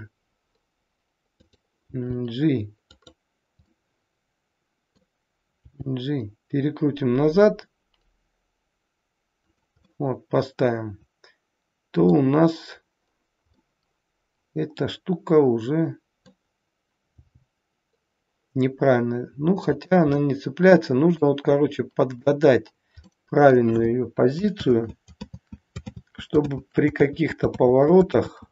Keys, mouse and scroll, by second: 1.9 g, 3.8 middle click, 5.5 g, 9.8 middle click, 13.5 middle click, 20.1 middle click, 24.5 ctrl+z, 25.1 ctrl+z, 25.9 ctrl+z, 26.4 ctrl+z, 27.6 ctrl+z, 28.0 ctrl+z.